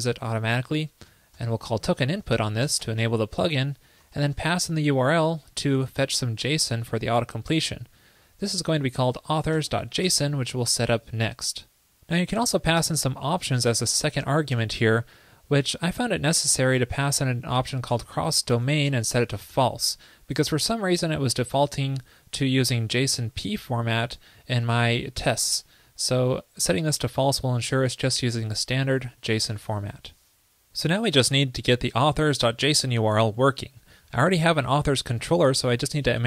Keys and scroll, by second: 29.6 super+s.